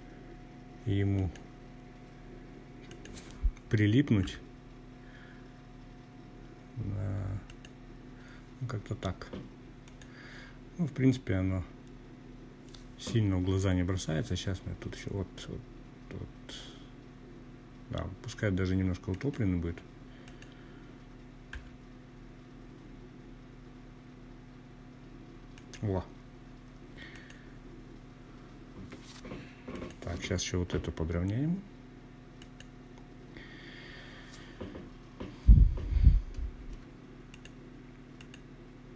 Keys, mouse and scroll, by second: 0.9 click, 2.2 g, 5.4 click, 7.8 click, 12.1 g, 17.1 click, 18.2 click, 19.5 g, 23.5 click, 25.1 click, 27.7 click, 28.7 g, 30.3 click, 35.3 shift+drag, 36.1 shift+click, 37.2 shift+drag, 37.9 shift+click, 38.6 shift+click.